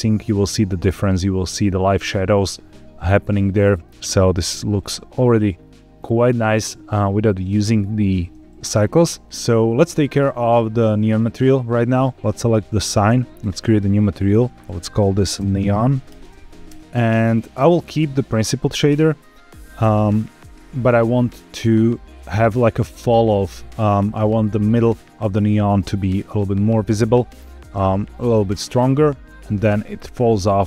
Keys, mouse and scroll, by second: 0.7 click, 3.1 shift+middle click, 5.0-5.6 scroll down 2, 5.6 scroll up 1, 11.9 click, 13.3 click, 14.1-16.7 drag, 16.8 middle click, 16.8 scroll down 4, 17.0-17.8 scroll up 2, 17.8 click, 18.5 click, 19.2 middle click.